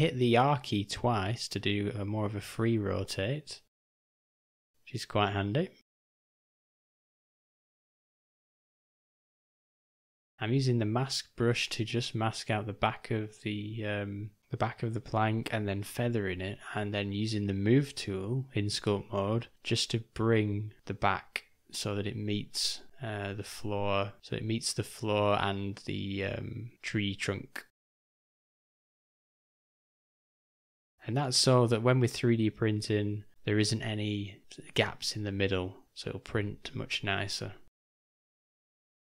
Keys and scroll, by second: 0.4 g, 5.1 d, 5.8 /, 7.1 m, 8.1 ], 8.2 ], 12.9-13.9 shift+,, 13.9 shift+/, 14.5 shift+m, 16.8 /, 17.9 o, 20.8 d, 21.5 s, 24.0 g, 24.2 ], 26.7 d, 26.7 [, 26.9 [, 28.3 [, 28.5 [, 32.5 o, 38.7 shift+d.